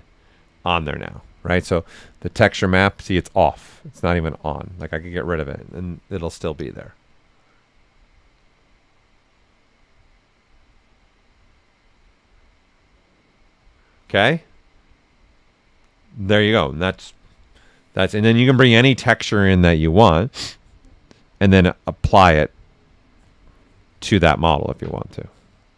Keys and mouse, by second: 2.3 ctrl+click, 18.1 ctrl+click.